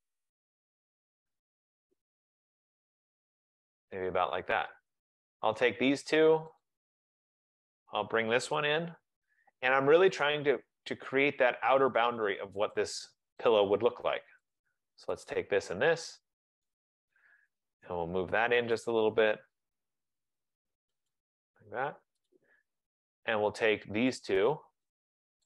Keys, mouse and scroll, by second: 0.8 click, 3.8 click, 5.4 click, 6.7 shift+click, 7.9 click, 8.6-9.0 typing, 10.4 click, 12.8 click, 13.6 click, 14.7 click, 15.4 shift+click, 16.8 click, 17.5-17.9 typing, 17.9 Return, 19.1 click, 21.2 click, 21.8 typing, 22.4 click, 23.0 click, 24.2 shift+click.